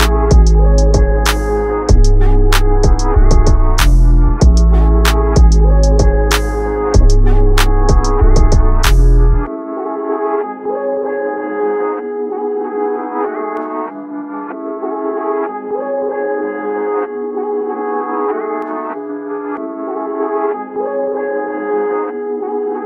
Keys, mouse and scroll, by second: 0.2-0.9 scroll down 2, 0.9 click, 2.1-2.4 scroll down 1, 2.4-3.6 scroll up 2, 3.6 click, 3.9 scroll up 2, 4.4-4.7 scroll down 1, 5.4 click, 5.6-6.1 scroll up 2, 6.2 click, 6.5 scroll down 1, 7.7 click, 8.4 click, 8.9 click, 9.3 scroll up 2, 9.8 click, 11.6 e, 16.5 click, 18.6 scroll up 2, 18.8 click, 19.7 ctrl+a, 21.9 ctrl+z, 22.1 ctrl+z.